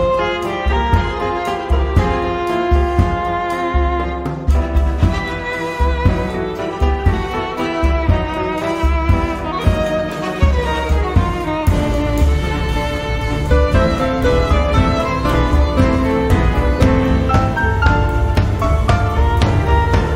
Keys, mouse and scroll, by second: 0.2 click, 2.4-2.9 scroll up 2, 3.4-4.0 scroll down 2, 4.2-5.5 scroll up 4, 5.8-6.2 scroll down 2, 6.4-7.1 scroll down 4, 8.6 click, 9.7-10.1 scroll up 2, 10.5-11.0 scroll up 2, 11.1-12.6 scroll down 6, 15.1 click, 15.9-16.2 scroll down 2, 16.9-18.3 drag, 19.1 click.